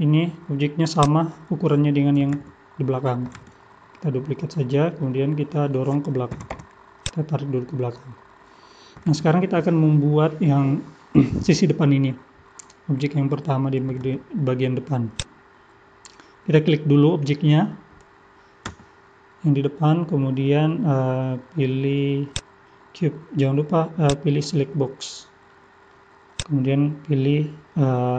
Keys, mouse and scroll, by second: 4.5 middle click, 5.2-5.5 scroll down 3, 5.5 middle click, 6.3 g, 7.4 middle click, 8.1-8.5 scroll up 2, 15.1 click, 15.8-18.2 scroll up 2, 18.7 Tab, 22.3 click, 24.0 click, 25.5 middle click, 26.4 click, 27.3 middle click.